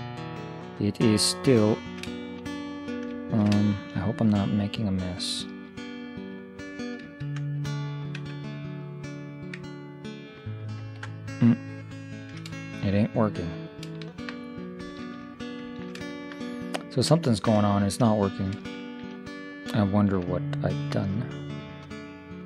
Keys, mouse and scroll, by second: 1.1 click, 1.8 middle click, 7.1 ctrl+0, 8.3 Tab, 10.8 ctrl+0, 12.1 middle click, 15.1 ctrl+3, 18.5-20.9 middle drag.